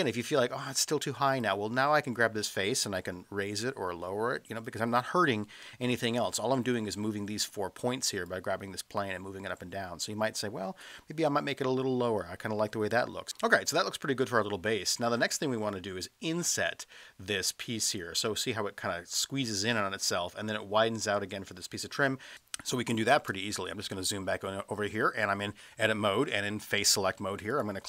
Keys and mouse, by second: 1.4-4.6 drag, 8.3-12.9 drag, 13.4-13.9 middle drag, 22.4 space, 27.6 click.